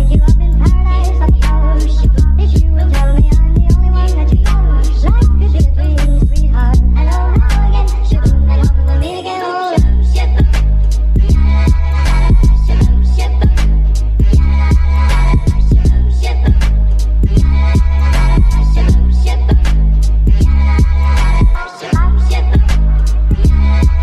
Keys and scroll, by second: 0.6 m, 1.8 Delete, 20.7 ctrl+d.